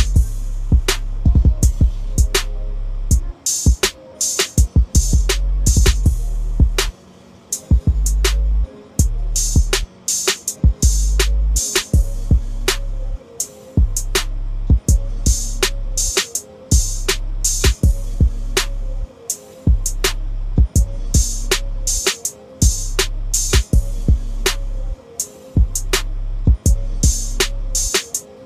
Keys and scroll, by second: 17.3 ctrl+z, 22.2 ctrl+d.